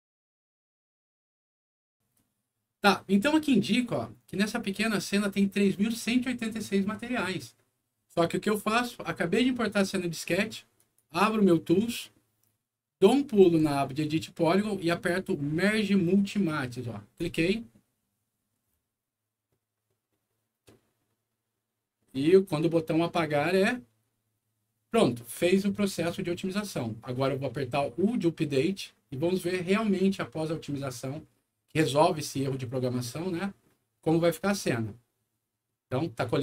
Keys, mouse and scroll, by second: 10.7 click, 17.1 click, 34.5 click.